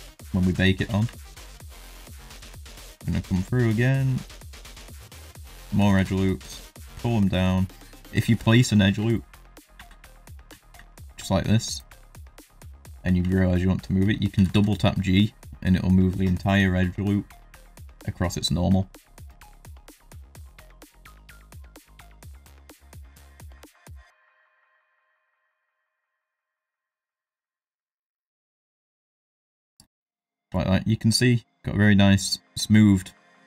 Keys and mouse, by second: 0.2 shift+middle drag, 0.6 ctrl+middle drag, 1.0 Tab, 1.6 ctrl+r, 2.7 ctrl+r, 5.0 shift+click, 7.3 g, 9.1 shift+middle click, 9.7 ctrl+r, 12.6 shift+middle click, 13.3 shift+middle click, 14.3 g, 19.4 x, 19.8 middle click, 19.9 shift+middle click, 19.9 middle click, 20.3 middle click, 20.4 shift+middle click, 20.6 ctrl+r, 21.1 shift+middle click, 21.2 ctrl+middle click, 21.4 ctrl+r, 21.7 ctrl+r, 22.0 ctrl+z, 22.0 middle click, 22.2 ctrl+r, 22.8 ctrl+r, 23.3 middle click, 23.4 shift+middle click, 23.7 middle click, 23.9 ctrl+r, 24.3 ctrl+r, 24.7 middle click, 24.9 middle click, 25.6 middle click, 26.0 g, 26.9 middle click, 27.3 ctrl+r, 28.1 middle click, 28.2 shift+middle click, 28.4 ctrl+r, 28.8 ctrl+r, 29.1 middle click, 29.3 ctrl+r, 29.6 Tab, 29.7 middle drag, 30.5 shift+middle drag, 30.8 middle drag, 31.2 middle drag, 31.7-33.0 middle drag, 33.3 shift+middle drag.